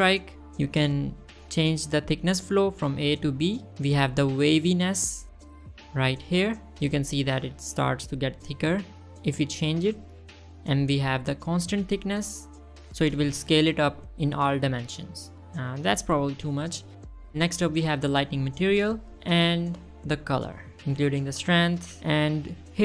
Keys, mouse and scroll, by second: 0.5 scroll down 1, 0.6 middle click, 0.7 scroll up 2, 1.3-2.0 drag, 2.4-2.7 drag, 3.2-4.8 shift+drag, 5.2 shift+middle drag, 6.3-10.6 shift+drag, 11.0 shift+middle click, 12.0-17.2 shift+drag, 18.4-19.6 drag, 21.9 click, 22.4 scroll down 1, 22.6 middle click.